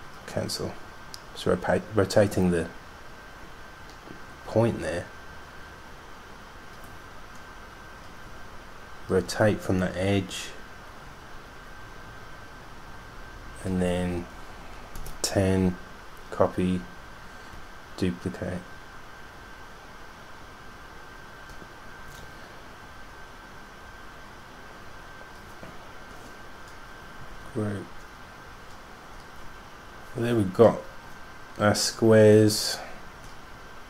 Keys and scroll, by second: 15.0-15.7 typing, 17.8 super+d, 18.4 super+d, 18.6 super+d, 18.7 super+d, 18.9 super+d, 19.2 super+d, 20.1 super+d, 20.4 super+d, 20.6 super+d, 21.0 super+d, 21.2 super+d, 21.6 super+d, 21.9 super+d, 22.4 super+d, 27.5 super+g.